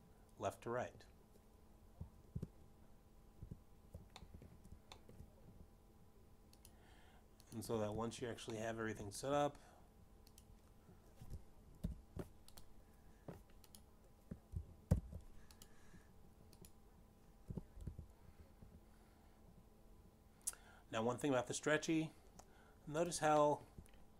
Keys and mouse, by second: 0.0 z, 1.0 click, 1.4 middle click, 6.5 alt+g, 6.5 alt+r, 6.8 middle click, 7.5 shift+middle click, 9.2 click, 9.9 click, 11.1 shift+middle click, 12.9 click, 14.0 alt+o, 15.1 click, 15.8 click, 17.4 ctrl+alt+p, 17.8 click, 19.3 click, 19.8 g, 20.3 z.